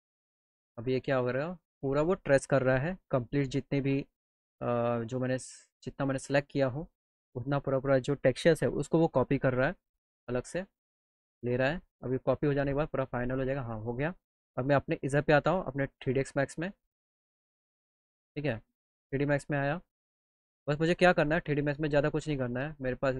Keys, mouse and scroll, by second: 18.0 click, 18.5 click, 19.2 click, 19.7 click.